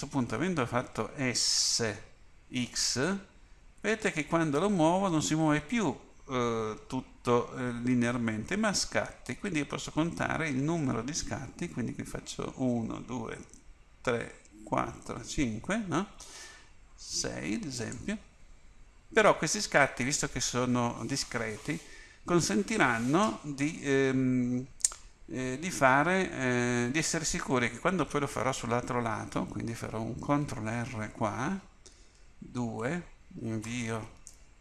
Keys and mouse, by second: 1.8 s, 26.0 a, 31.2 ctrl+r.